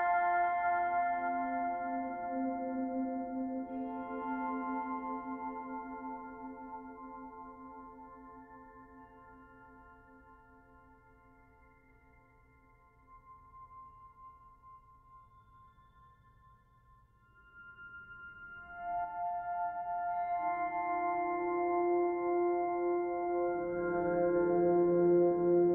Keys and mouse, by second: 2.8 alt+click, 3.6-5.3 alt+shift+drag, 5.2 g, 5.3 g, 6.8-8.2 alt+drag, 10.6-12.2 alt+drag, 13.3-15.5 drag, 15.5 Delete, 17.5 click, 18.1 alt+click, 19.0 ctrl+z, 19.2 ctrl+alt+click, 20.0 Delete, 21.3 click, 22.4 Tab, 22.9-24.8 alt+drag, 24.8 alt+middle click, 24.9 click, 25.5 Tab.